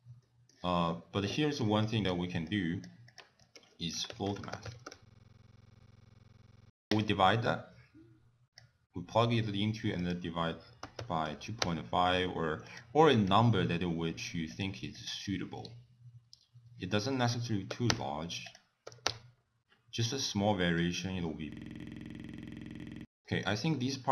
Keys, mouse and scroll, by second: 0.2 shift+middle click, 1.4 middle click, 1.8 click, 2.5 click, 3.1 click, 3.6 ctrl+a, 5.2 middle click, 5.4 click, 5.5 click, 5.7 click, 5.9 click, 6.2 click, 6.4 click, 7.5 click, 9.2 middle click, 9.5-10.0 scroll up 2, 10.0 click, 12.7 click, 13.3 click, 14.1 click, 14.5 click, 15.0 click, 15.7-17.0 scroll down 6, 17.2 click, 18.5 click, 20.0 middle click, 20.9-21.3 scroll up 4, 21.7 click, 21.7 click, 22.1 click, 22.2 scroll down 2, 22.3 middle click, 23.0 click, 23.1 middle click, 23.1 scroll up 1, 23.3-24.1 scroll down 4.